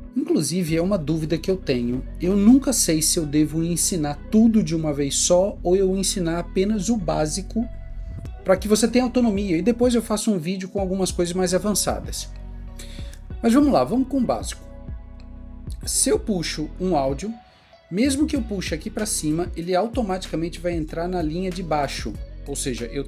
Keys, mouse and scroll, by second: 22.4 right click.